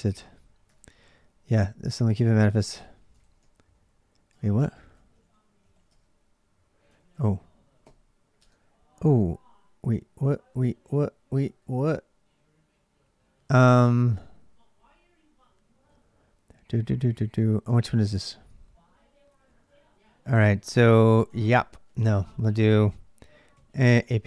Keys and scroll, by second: 0.5 ctrl+[, 0.6-3.4 typing, 2.9 ctrl+[, 3.0 ctrl+j, 4.1 ctrl+[, 4.1 ctrl+j, 4.5-7.6 typing, 6.8 ctrl+[, 8.2 Return, 10.3-21.9 typing, 21.8 ctrl+[, 21.8 ctrl+j, 23.1-23.8 typing.